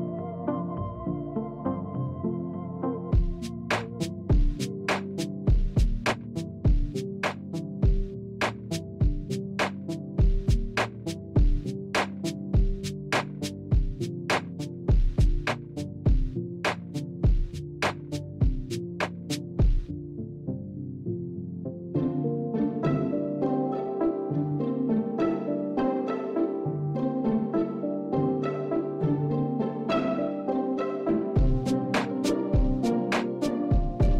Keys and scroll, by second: 15.7 space, 18.5 space, 26.7 space.